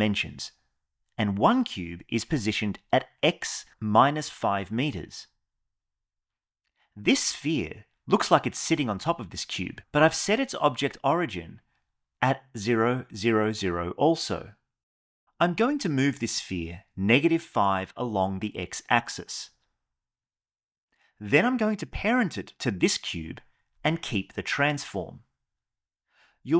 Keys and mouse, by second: 1.6 click, 6.7 click, 17.3 g, 18.1 x, 22.6 shift+click.